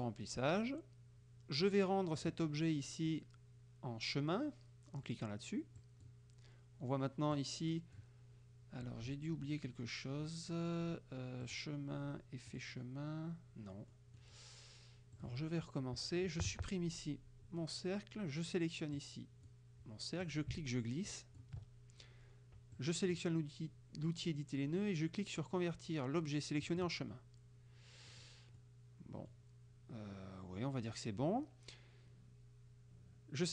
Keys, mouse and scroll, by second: 0.0 click, 2.3 click, 5.9 click, 7.4 click, 11.5 click, 12.6 click, 14.0 click, 15.3 click, 16.5 Delete, 19.0 click, 20.3-21.6 ctrl+drag, 22.8 click, 26.7 click, 28.1 middle click, 28.6 middle click.